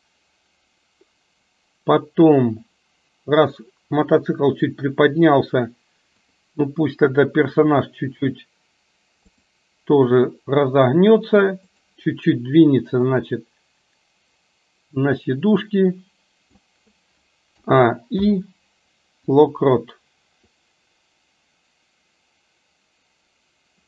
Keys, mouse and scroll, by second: 6.4 click, 7.8 r, 11.9 click, 13.5-16.8 drag, 17.6 a, 18.3 i, 20.6-23.8 drag.